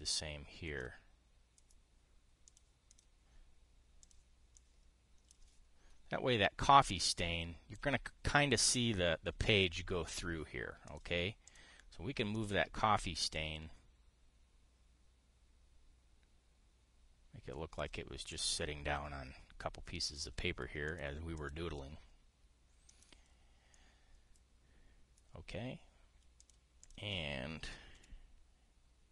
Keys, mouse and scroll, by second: 0.5-1.6 drag, 3.2 click, 3.6 click, 4.7 click, 5.3 click, 7.8 click, 11.6 click, 12.2 click, 13.1-18.6 drag, 19.0 click, 20.7 click, 21.5 click, 22.0 click, 23.6 click, 25.6 click, 27.1 click, 27.5 click, 28.7 KP_5.